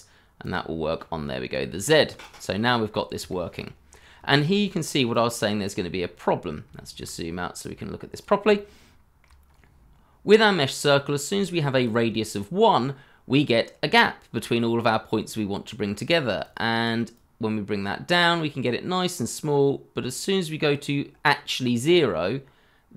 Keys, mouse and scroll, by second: 2.8 scroll up 1, 3.3 shift+middle click, 3.8 scroll down 1, 4.2 shift+middle click, 6.3-6.6 scroll down 1, 6.7 shift+middle click, 8.5 shift+middle click, 9.4 scroll up 1, 11.4 shift+middle click, 16.4 double click.